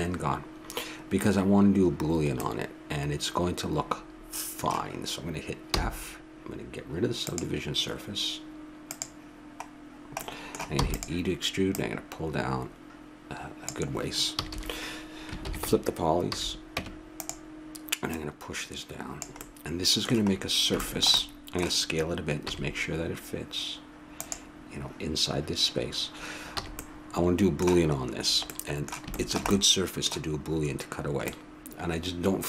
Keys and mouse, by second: 2.4-4.0 middle drag, 5.7 f, 7.2-10.7 drag, 10.7 middle click, 10.8 e, 11.7-13.5 drag, 14.4 a, 14.5 a, 15.4 ctrl+n, 16.3 a, 16.8 Tab, 18.1 right click, 21.0-22.5 drag, 22.5 s, 26.6 a, 26.7-28.7 middle drag, 29.3-32.4 middle drag.